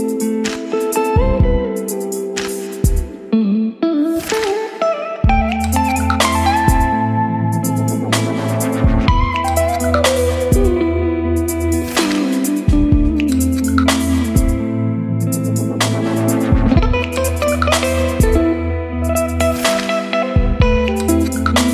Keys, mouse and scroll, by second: 8.8-11.6 middle drag, 11.6-18.3 drag, 18.3-20.1 right drag, 20.1-21.7 drag.